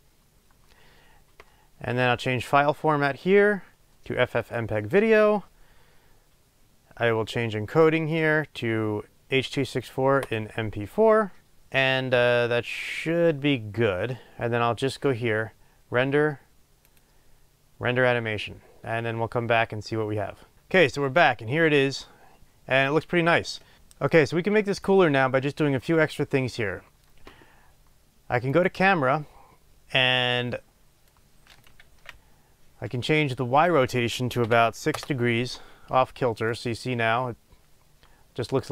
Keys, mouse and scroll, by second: 0.0-23.7 drag, 23.7-25.2 right drag, 28.7 click, 31.3-36.6 drag, 32.0 ctrl+z, 35.2 Return, 36.6-38.7 right drag.